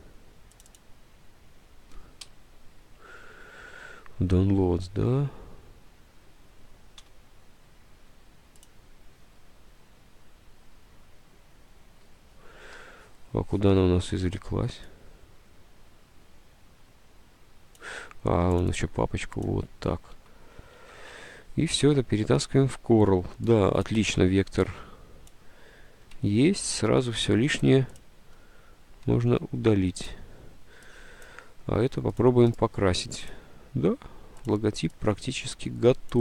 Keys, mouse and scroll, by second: 2.4 F5, 7.1 w, 20.3 alt+Tab, 20.8 alt+Tab, 26.7 ctrl+u, 28.5 Delete.